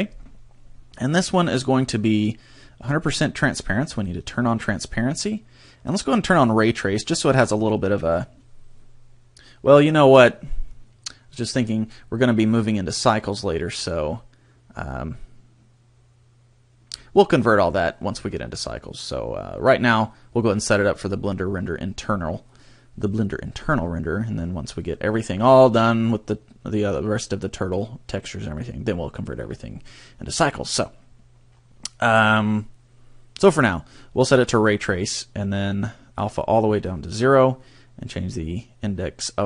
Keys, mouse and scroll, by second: 1.1-2.7 scroll down 5, 4.0 click, 5.1-6.3 scroll down 2, 6.3 click, 36.1 click.